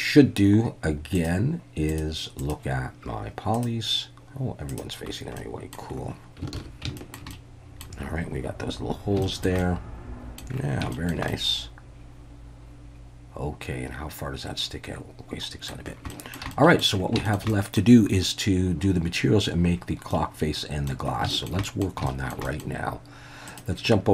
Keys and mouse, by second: 1.1 click, 1.9 click, 2.4-5.1 drag, 5.4-5.7 middle drag, 6.5 ctrl+s, 7.0 shift+middle click, 7.3-7.8 middle drag, 9.2 shift+middle drag, 9.6-10.4 middle drag, 10.9 shift+middle drag, 11.3-15.7 middle drag, 16.1 shift+middle drag, 16.5-16.8 middle drag, 17.3 shift+middle drag, 17.5 middle click, 20.1-20.9 middle drag, 21.3 shift+middle drag, 21.6 middle click, 22.1 shift+middle drag, 22.5 middle click.